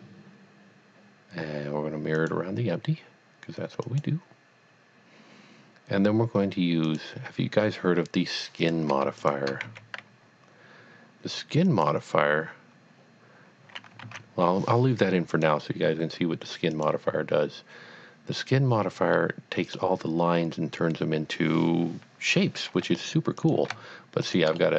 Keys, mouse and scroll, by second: 2.1 click, 4.0 click, 6.8 click, 7.0 click, 8.6 click, 9.2 shift+click, 9.7 x, 11.7 click, 14.3 z, 15.3 click, 16.8 click, 19.1 middle click, 23.4 click, 24.2 shift+click, 24.6 middle click.